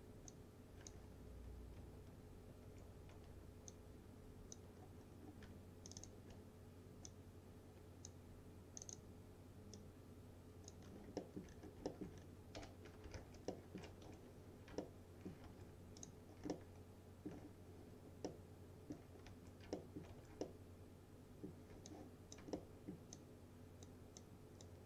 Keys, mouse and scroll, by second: 0.3 click, 0.4-1.0 drag, 2.7 ctrl+z, 3.8-4.7 drag, 5.1 scroll up 1, 5.9 ctrl+click, 7.4-8.4 click, 10.1-11.1 click, 10.9 scroll down 2, 11.5 alt+middle click, 11.6-11.9 scroll down 2, 11.9 alt+middle click, 12.2-12.6 scroll down 2, 12.6 p, 13.2 alt+q, 13.6 alt+middle click, 14.1 F3, 14.5-14.8 scroll up 2, 14.9-15.5 alt+middle click, 15.5 1, 16.0 click, 16.6-17.5 alt+middle drag, 18.3-19.2 alt+middle click, 19.3 1, 19.8 alt+middle click, 20.2 1, 20.8-21.7 alt+middle drag, 21.9-22.6 click, 22.6-24.1 alt+middle click, 23.5 alt+click, 24.2-24.8 alt+click.